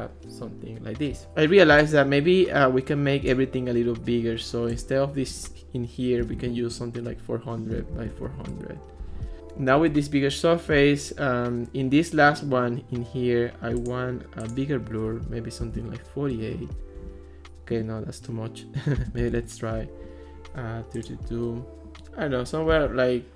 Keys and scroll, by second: 6.0-8.7 typing, 15.7 4, 16.1 8, 16.3 Return, 18.8-19.7 typing, 22.7 3.